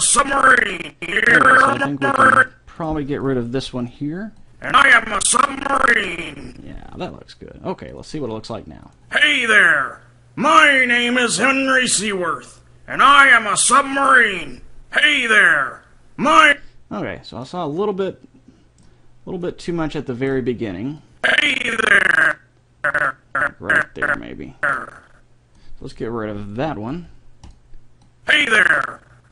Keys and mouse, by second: 2.8 right click, 3.4 right click, 3.6 Delete, 4.6-6.1 drag, 7.9 click, 8.3 click, 8.6 click, 16.3-18.2 drag, 18.3 middle click, 19.4-21.2 middle drag, 21.2-22.9 drag, 25.9-26.9 right drag, 26.9 Delete, 28.2-29.3 drag.